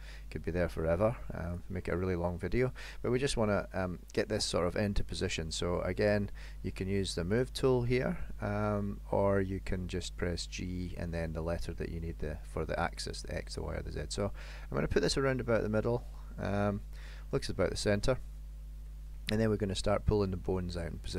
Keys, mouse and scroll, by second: 1.6 click, 3.4 KP_1, 7.4 click, 8.7 click, 15.2 middle click, 17.6 middle click, 18.9 middle click.